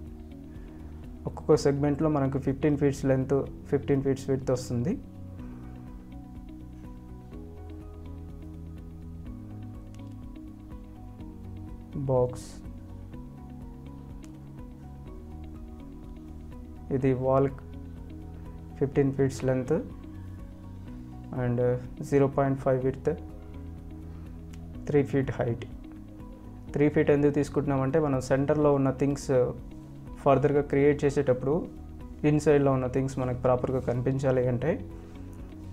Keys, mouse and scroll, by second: 1.7 click, 2.3 F3, 2.4 click, 2.8 scroll up 1, 3.3 ctrl+alt+click, 4.8 p, 5.5 click, 5.9 scroll down 1, 6.8-7.3 scroll up 1, 7.3 click, 8.0 F4, 8.7 click, 13.5 scroll up 1, 14.9 click, 21.0 Tab, 21.6 BackSpace, 22.9 Tab, 26.8 click, 27.8 ctrl+alt+click, 29.3 scroll up 1, 29.4 click, 33.3-34.0 scroll up 1, 34.2-34.9 scroll down 1, 34.9 click.